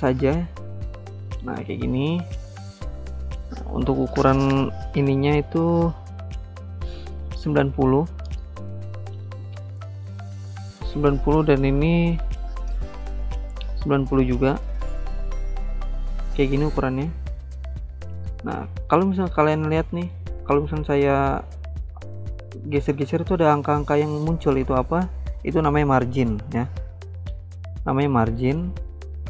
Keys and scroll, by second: 0.0 ctrl+c, 0.2 ctrl+v, 8.1-9.5 typing, 9.6 Return, 13.9-14.7 typing.